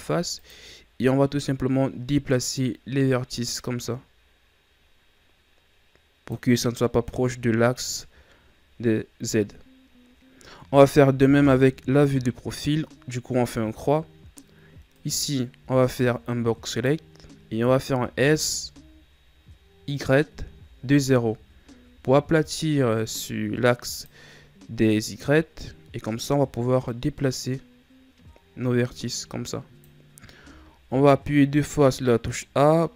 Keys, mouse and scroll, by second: 2.5-5.6 drag, 11.9 KP_3, 14.9 right click, 15.6 b, 18.0 s, 26.2-29.3 drag, 30.4 a, 30.8 a, 32.1-32.9 drag.